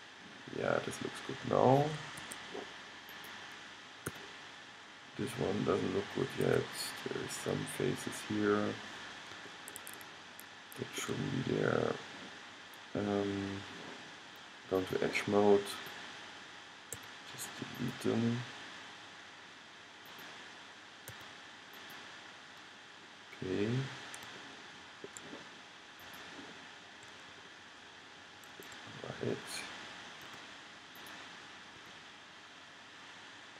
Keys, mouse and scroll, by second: 3.2-4.4 middle drag, 4.2 g, 4.4 click, 9.5-10.9 middle drag, 10.9 click, 12.6-14.9 middle drag, 17.2 x, 17.8-20.2 middle drag, 21.2 x, 26.1-29.5 middle drag, 30.3 g, 31.1-33.0 middle drag, 31.9 g.